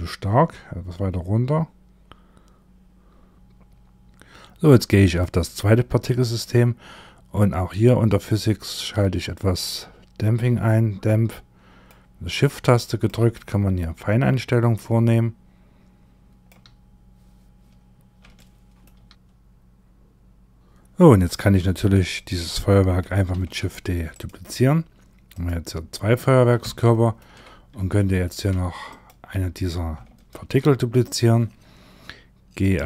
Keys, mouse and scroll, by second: 3.3 click, 3.3-4.5 scroll up 10, 4.5 click, 5.4-7.5 scroll down 14, 9.8 click, 11.7 click, 12.9 shift+click, 17.2-17.8 scroll up 3, 17.8 shift+middle click, 18.9 middle click, 21.6 click, 22.8 shift+d, 24.8 click, 26.1 shift+middle click, 26.9 scroll down 4, 27.5 shift+middle click, 28.4 click, 29.9 shift+d, 32.1 click.